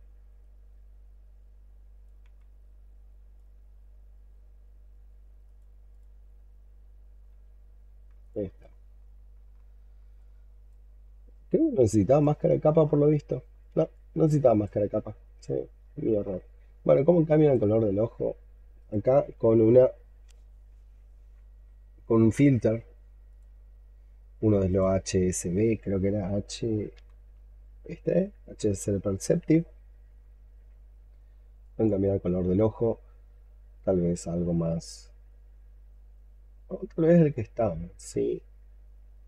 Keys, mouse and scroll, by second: 2.1 x, 3.6-5.8 scroll up 7, 5.8 double click, 7.1-8.2 scroll down 16, 8.2 alt+click, 8.7-9.4 scroll down 11, 9.4 alt+middle click, 11.7 alt+middle click, 11.9 shift+click, 12.7-13.6 scroll up 14, 13.8 alt+click, 15.0-15.6 scroll down 11, 15.8 alt+middle click, 18.6 right click, 26.8 h, 30.1-39.2 scroll up 4.